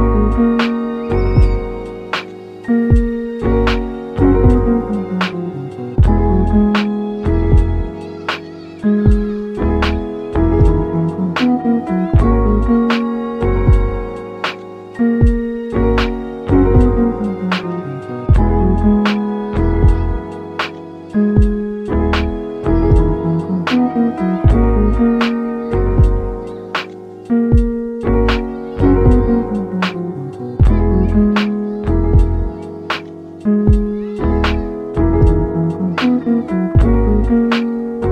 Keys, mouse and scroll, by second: 0.0 click, 0.3 middle drag, 0.5 Tab, 1.1 Tab, 1.5 3, 1.7 click, 2.0-3.5 middle drag, 3.4 i, 6.1 click, 6.4-6.9 middle drag, 6.8 e, 8.0 click, 8.2-9.3 middle drag, 9.3 s, 10.0 click, 10.6-11.6 shift+middle drag, 11.6 scroll up 1, 11.9-12.5 middle drag, 12.4 ctrl+r, 12.7 ctrl+click, 13.9 click, 14.3 ctrl+r, 14.4 ctrl+click, 15.9 click, 16.1-16.6 middle drag, 16.6 3, 16.8 click, 17.2-18.7 middle drag, 18.7 e, 21.0 click, 21.3 scroll down 2, 21.4-21.8 middle drag, 21.8 e, 22.6 click, 22.7 s, 23.9-24.2 scroll down 3, 24.2-24.6 shift+middle drag, 24.6 shift+e, 26.4 click, 26.7 scroll down 1, 26.9-27.3 middle drag, 27.3 s, 28.5 scroll down 2, 28.7-29.1 middle drag, 29.0 g, 31.4 click, 31.7 s, 32.3 click, 32.6 shift+middle click, 32.9 shift+scroll up 3, 33.5 ctrl+r, 33.8 click, 34.8 click, 35.9-36.4 shift+middle drag, 36.4-36.9 scroll up 1, 36.9 ctrl+r, 37.1-38.1 ctrl+drag.